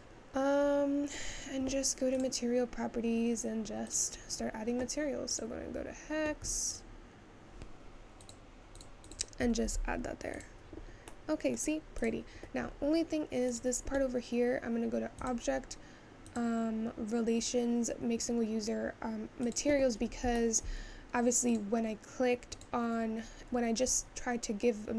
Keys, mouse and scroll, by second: 11.1-12.4 middle drag, 12.4 click, 12.8-14.1 scroll up 3, 14.1 click, 20.1 scroll up 1, 20.4-21.5 shift+middle drag, 21.5 click, 22.6 click, 23.5-23.9 scroll down 4.